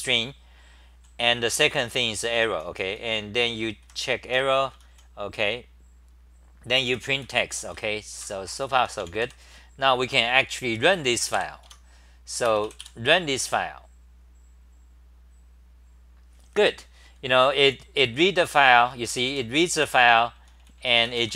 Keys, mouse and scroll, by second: 1.0-4.9 typing, 6.6-9.7 typing, 11.3 3, 11.6 Home, 18.0-21.3 typing, 21.2 ctrl+g.